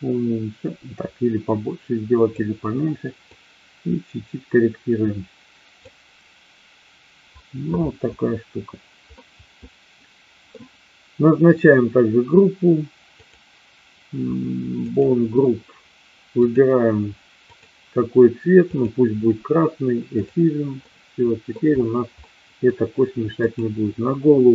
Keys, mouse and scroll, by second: 3.2-5.9 drag, 9.2-10.5 middle drag, 13.1 click, 14.7 click, 17.5-18.9 drag, 20.1 click, 20.7-21.5 middle drag, 22.2 middle click, 23.5-24.4 drag.